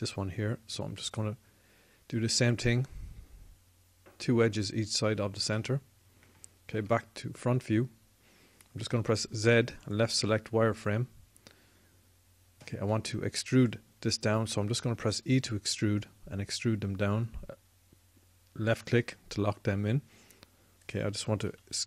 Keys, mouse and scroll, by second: 1.9-5.7 drag, 7.5 KP_1, 9.8 z, 15.2 e.